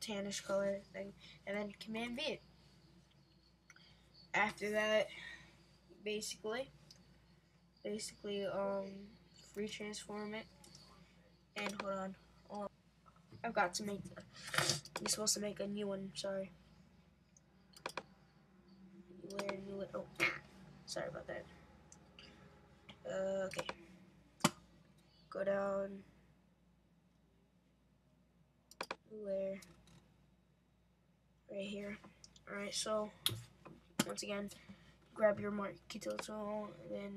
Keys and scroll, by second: 2.0 super+v, 9.6 super+t.